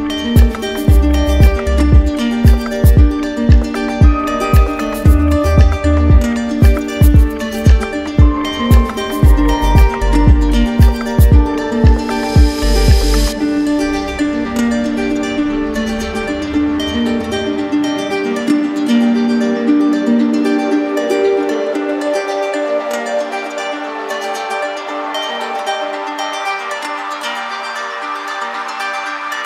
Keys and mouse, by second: 7.8 click, 13.3 click, 14.3 click, 19.1-20.2 drag.